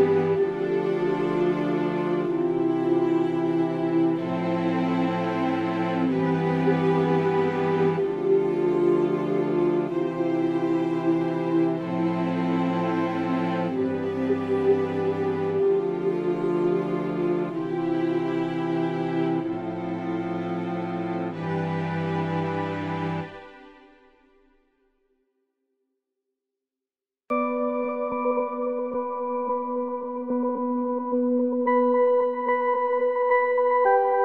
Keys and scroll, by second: 5.2 ctrl+shift+[, 6.1 ctrl+], 11.7 alt+v, 24.1 ctrl+shift+[, 28.7 ctrl+], 28.7 alt+[, 29.3 v, 29.9 u.